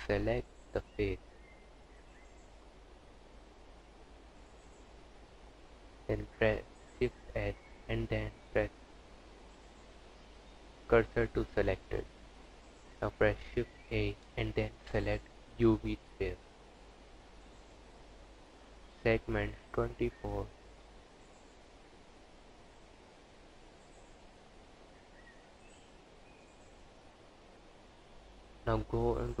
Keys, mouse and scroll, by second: 2.1 click, 5.4 shift+s, 10.2 Tab, 11.8 shift+a, 21.3 click, 23.0 click, 26.6 KP_1.